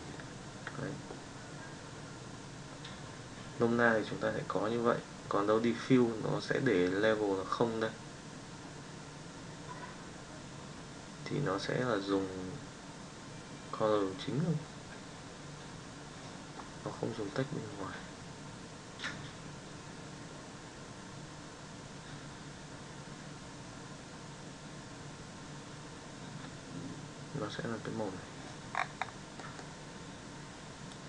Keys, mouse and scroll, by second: 30.9 click.